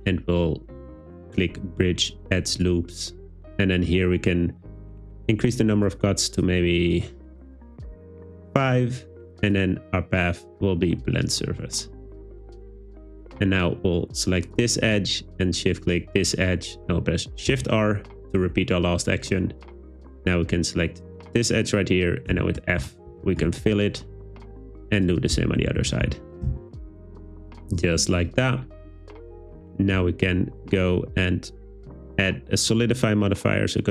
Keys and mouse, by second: 5.9 click, 6.4 click, 7.0 click, 7.6 click, 9.5-11.3 drag, 17.5 shift+r, 20.7 click, 22.3-23.4 typing, 25.4-26.5 typing, 27.7 Tab, 32.7 click.